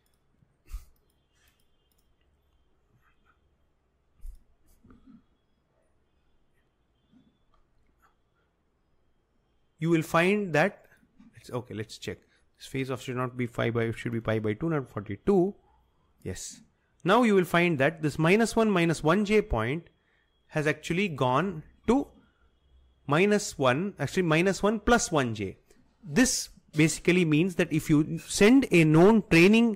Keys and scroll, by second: 14.1 BackSpace, 14.3 BackSpace, 15.4 BackSpace, 16.5 typing.